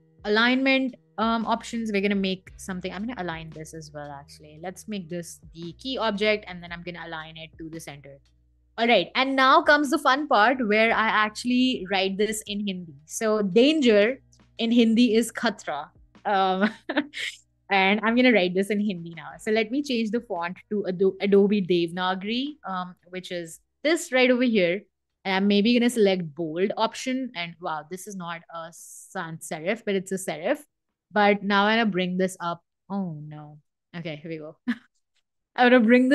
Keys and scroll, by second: 19.8-22.9 typing.